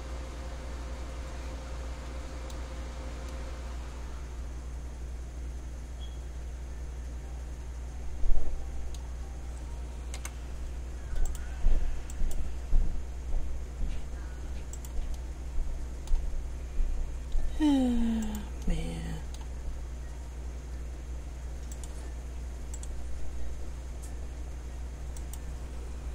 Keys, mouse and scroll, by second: 3.4 middle click, 10.4 k, 15.4 middle click, 18.8 middle click.